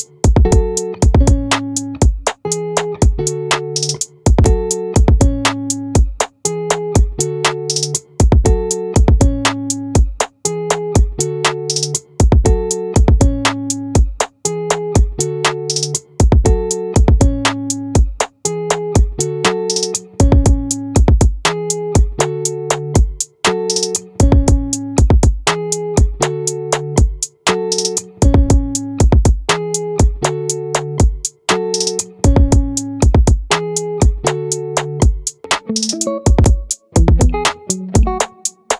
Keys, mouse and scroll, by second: 11.0 z, 12.6 middle click, 15.6 middle click, 19.7-23.1 right drag, 25.1 a, 26.7 ctrl+z, 32.8-34.1 middle drag, 35.3 z.